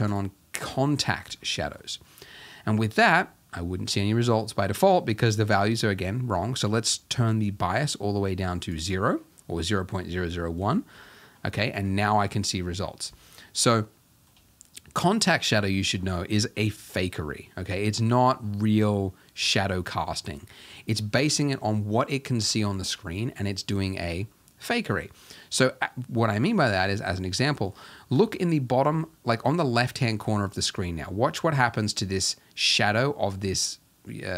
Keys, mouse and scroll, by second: 0.1 click, 0.9-1.4 scroll down 6, 2.1 shift+middle click, 2.4-7.7 scroll up 2, 7.7-9.0 shift+drag, 9.0-10.3 scroll down 1, 10.3-10.7 scroll down 1, 10.7 shift+middle click, 11.0-11.6 scroll up 3, 11.6-15.9 shift+middle drag, 15.9-16.5 scroll up 3, 16.5-26.8 shift+middle drag, 26.8-27.4 scroll up 1, 27.4 scroll up 1, 27.6-34.3 middle drag.